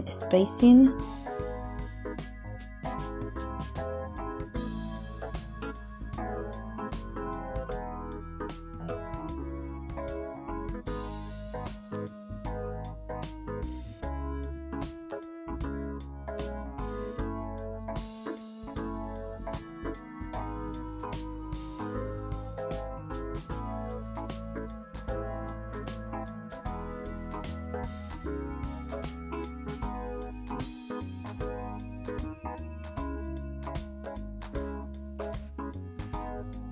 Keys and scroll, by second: 6.7 2, 6.8 Return, 12.2 n, 21.5 1, 22.4 Return, 34.9 shift+s.